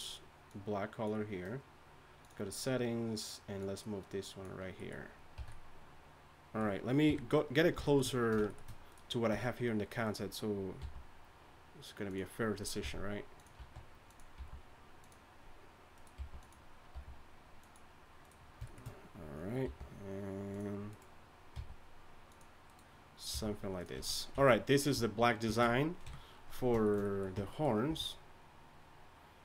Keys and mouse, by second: 5.3 a, 7.1 KP_3, 9.3 Tab, 10.8 g, 13.3 g, 13.6 s, 14.3 g, 16.1 g, 16.9 r, 19.6 r, 21.5 g, 23.3 g, 23.9 z, 24.3 z, 26.0 KP_1, 27.3 Tab, 27.9 a.